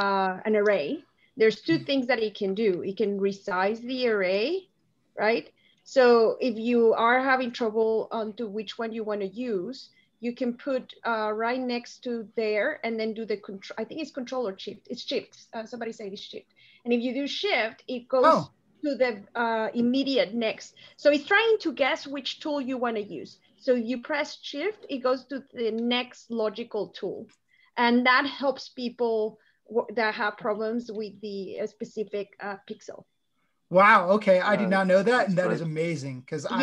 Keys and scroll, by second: 3.0 ctrl+space, 3.9-4.7 typing, 5.9 ctrl+space, 6.5-7.4 typing, 36.4 Delete.